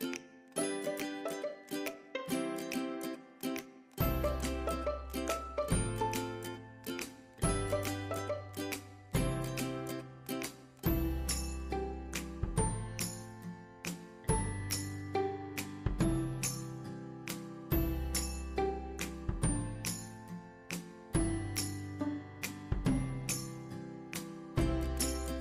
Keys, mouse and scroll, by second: 0.0 click, 1.0 scroll up 1, 1.6 click, 2.7-5.1 shift+right drag, 5.1 shift+click, 9.3 scroll down 1, 10.2-10.5 scroll up 1, 10.5 click, 15.8 click, 15.8 click, 18.3-23.9 drag, 18.3 typing, 23.7-25.1 typing, 25.3 Tab.